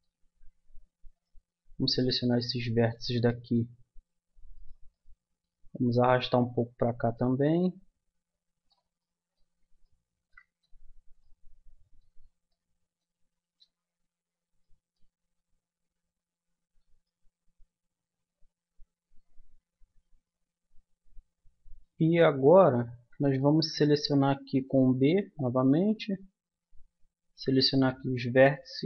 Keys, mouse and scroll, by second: 8.3 middle click, 9.1 middle click, 13.9 a, 14.5 middle click, 17.8-18.9 middle drag, 23.6-24.8 middle drag, 24.8 b, 26.1-27.6 drag, 27.8 click, 27.9 middle click, 28.0 click.